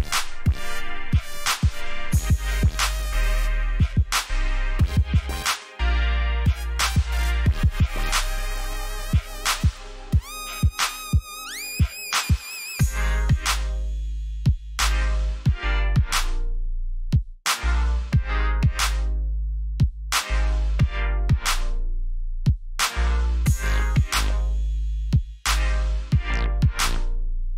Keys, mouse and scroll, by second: 5.5 alt+scroll down 1, 6.0 alt+scroll up 1, 6.6 alt+scroll down 1, 7.5 ctrl+alt+shift+e, 8.9 v, 10.5 click, 11.4-12.7 typing, 13.0 Return, 15.7 click.